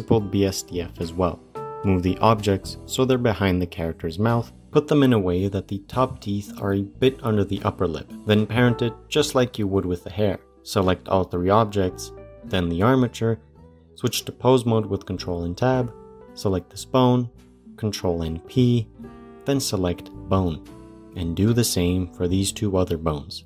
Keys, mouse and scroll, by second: 1.6 shift+middle click, 2.0 g, 7.0-7.4 middle drag, 7.4-8.1 scroll up 12, 8.1 middle click, 8.1 click, 10.3 click, 10.8 shift+click, 11.3 shift+click, 12.9 shift+click, 14.3 ctrl+Tab, 15.7 click, 17.4 ctrl+p, 19.8 click, 20.0 ctrl+o, 20.7 ctrl+p, 21.8 click, 22.4 ctrl+p.